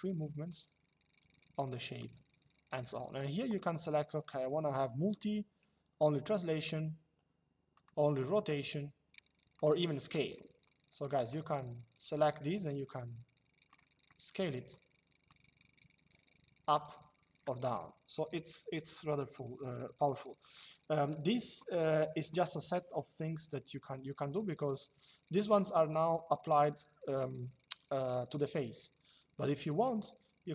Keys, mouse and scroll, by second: 6.4 click, 7.5 click, 9.2 click, 11.0 click, 13.8 shift+click, 15.0 click.